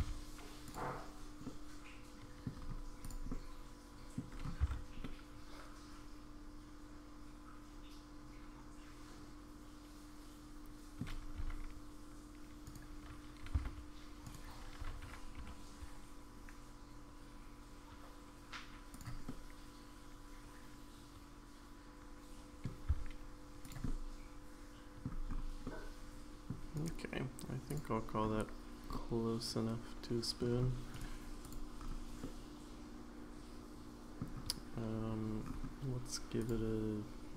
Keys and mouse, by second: 1.5 middle click, 3.0 click, 3.3 middle click, 4.6 Tab, 5.0-11.0 middle drag, 11.4 r, 13.4 r, 19.2-22.7 middle drag, 22.9 s, 23.8-25.0 middle drag, 25.6-26.5 middle drag, 26.7-27.7 right drag, 28.9-30.4 middle drag, 30.9-31.5 right drag, 32.2-34.2 middle drag.